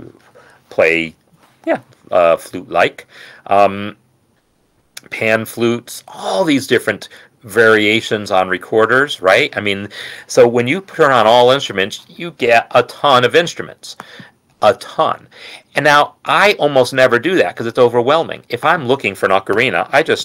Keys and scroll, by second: 19.6-20.2 typing.